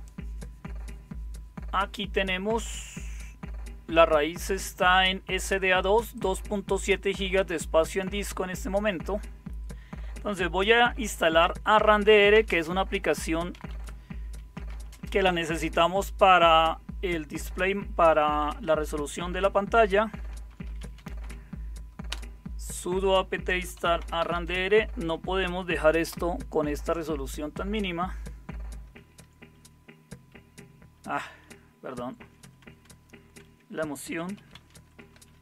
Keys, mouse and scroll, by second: 11.6-14.9 typing, 20.0-21.7 typing, 22.0 Return, 23.2-26.3 typing, 31.4 Left, 32.2 Left, 32.3 Left, 32.6 Left, 32.8-33.3 Left, 34.1-35.4 typing.